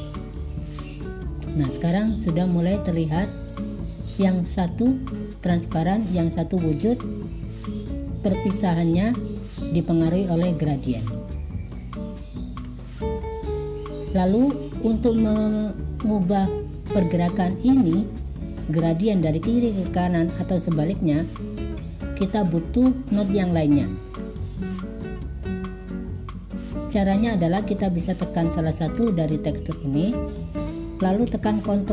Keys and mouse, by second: 3.5 click, 11.1 click, 12.7 click, 24.4 click, 28.9 click.